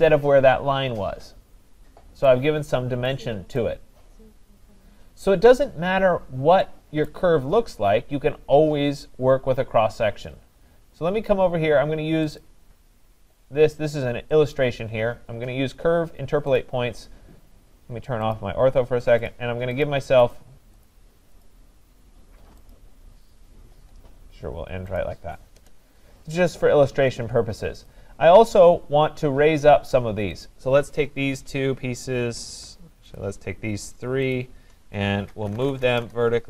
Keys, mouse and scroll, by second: 2.3 right click, 4.0 scroll, 6.0-6.6 scroll, 7.1 right click, 7.4-8.4 scroll, 8.4 scroll, 12.4 click, 14.6 click, 15.2-15.7 scroll, 16.6 click, 18.4 click, 19.3 click, 19.8 click, 20.4 click, 20.9 click, 21.4 click, 22.7 click, 25.0 click, 25.6 Return, 26.8-27.7 scroll, 27.9 click, 30.4 click, 30.9-31.9 scroll, 33.2 shift+click, 34.3 shift+click, 35.1-36.4 typing.